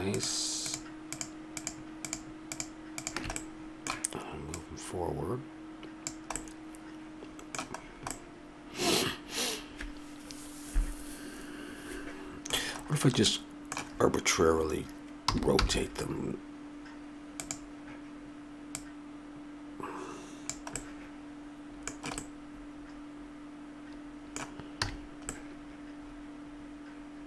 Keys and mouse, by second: 3.4-6.0 middle drag, 6.0 click, 6.4 middle click, 10.0 middle click, 12.8-15.1 middle drag, 15.3 r, 18.9-20.7 middle drag, 20.8-24.9 middle drag, 24.9 a, 25.4 middle click.